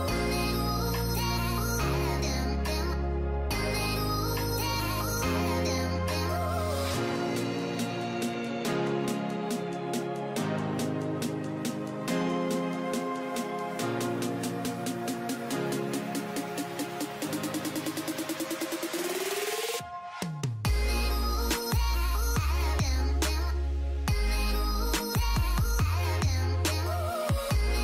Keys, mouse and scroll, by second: 3.9 shift+click, 4.0 shift+double click, 4.4 scroll down 1, 6.0 scroll down 1, 6.3 shift+click, 12.1 shift+click, 13.4 alt+scroll down 1, 14.5 super+scroll up 1, 14.6 space, 15.8-16.4 alt+scroll up 1, 17.4 shift+click, 26.8 shift+click, 27.3 alt+scroll down 1.